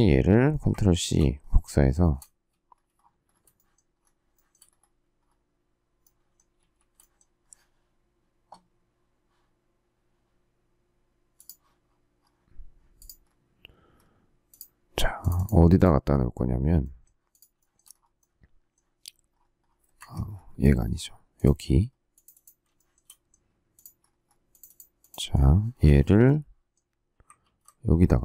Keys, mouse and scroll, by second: 0.9 ctrl+c, 2.0 shift+middle click, 3.5 shift+middle click, 3.9 shift+scroll, 4.3 shift+middle click, 6.5 shift+a, 17.5 shift+middle click, 17.7 shift+double middle click, 19.9 Escape, 22.7 shift+middle click, 22.8 shift+double middle click, 27.3 ctrl+v.